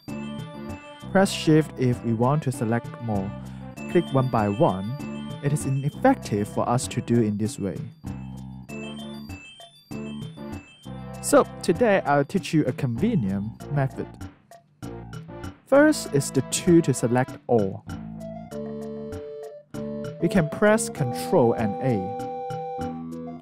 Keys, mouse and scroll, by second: 0.6 alt+click, 2.2 shift+click, 3.2 shift+click, 4.0 shift+click, 4.9 alt+click, 5.4 alt+right click, 10.5 alt+click, 11.0 alt+right click, 12.0 alt+click, 12.7 alt+middle click, 13.3 alt+right click, 13.7 alt+click, 15.4 alt+click, 15.8 alt+right click, 18.5 alt+right click, 19.4 alt+click.